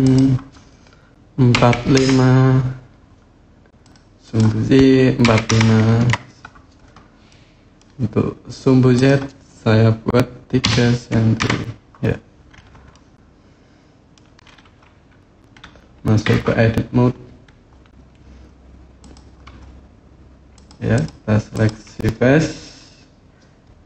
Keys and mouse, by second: 4.0-6.6 drag, 7.0 middle click, 8.7-11.8 drag, 12.7-13.9 middle drag, 16.2 Tab, 18.8 click, 20.3 click, 21.3 click.